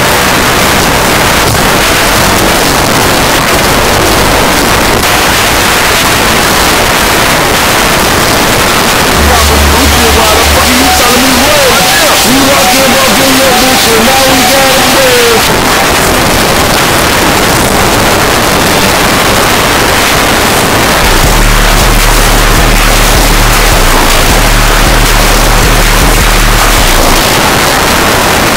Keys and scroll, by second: 1.4 u, 1.6 Down, 1.7 Down, 1.8 Down, 2.0 Down, 2.1 Down, 2.3 Down, 2.5 Return, 15.4 Page_Down, 27.2 Page_Down.